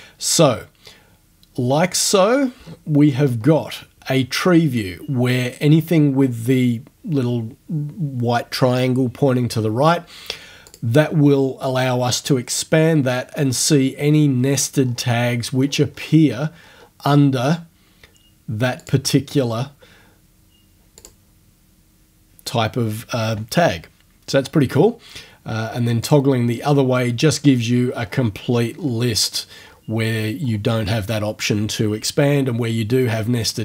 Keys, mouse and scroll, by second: 2.0-2.8 scroll down 1, 3.2-3.6 scroll up 1, 3.6-5.1 scroll down 1, 10.7 click, 14.0-14.7 scroll down 1, 14.7-16.5 scroll down 7, 16.6 scroll up 2, 16.8 scroll down 2, 18.8 click, 19.4 scroll down 1, 21.0 click, 26.0 click, 27.5-29.4 scroll down 4, 29.6-31.0 scroll down 7.